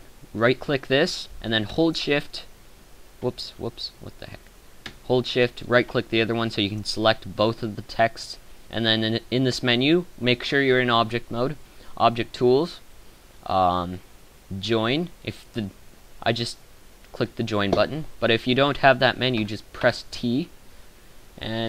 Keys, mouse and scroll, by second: 19.8 t.